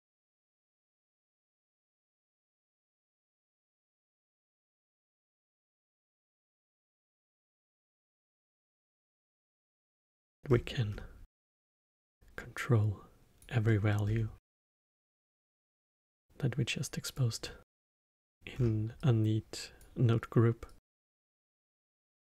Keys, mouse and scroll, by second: 0.3 middle click, 1.3 click, 2.3 x, 2.7 middle click, 3.4-4.6 scroll up 7, 4.6-7.8 drag, 8.6 middle click, 8.9-9.5 scroll down 4, 9.5 middle click, 10.4-11.2 scroll down 7, 11.2-12.0 middle drag, 12.0 click, 13.6 middle click, 14.0-14.5 scroll down 5, 14.5-15.5 middle drag, 15.5 click, 17.6 scroll up 8, 17.9 middle click, 18.5 scroll up 4, 18.9 click, 20.6-22.1 drag.